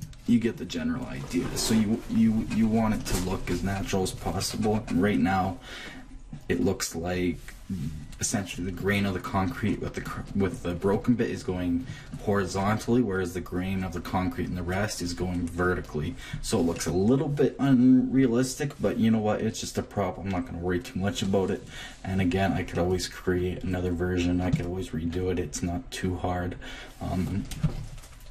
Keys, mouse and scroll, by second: 4.5-8.5 middle drag, 16.1-18.6 middle drag, 20.0-27.5 middle drag, 23.3 Left.